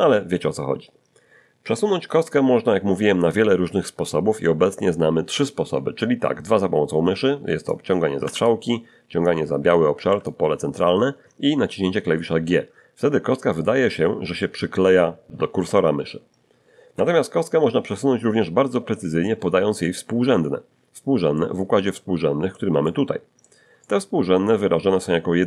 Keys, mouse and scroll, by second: 7.7 click, 8.2 Escape, 9.2-10.4 drag, 10.0 Escape, 12.4 g, 16.8 Escape, 21.3-22.7 middle drag, 22.8 middle click, 23.8-25.2 middle drag.